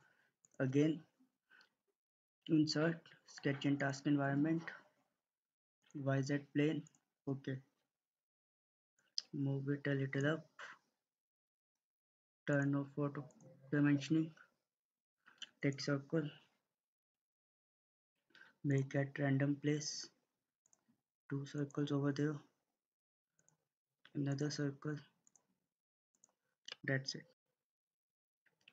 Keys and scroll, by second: 27.2 Escape.